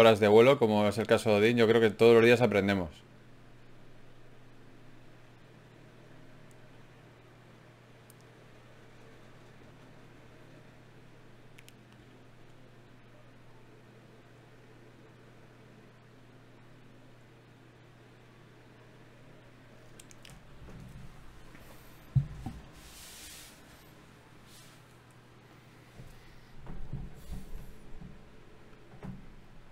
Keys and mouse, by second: 0.5 g, 4.5 ctrl+Tab, 5.3-6.7 drag, 6.7 f, 7.9 w, 11.1-12.7 right drag, 12.1 ctrl+Tab, 13.0 right click, 13.7 f, 13.9 f, 17.8-27.0 middle drag.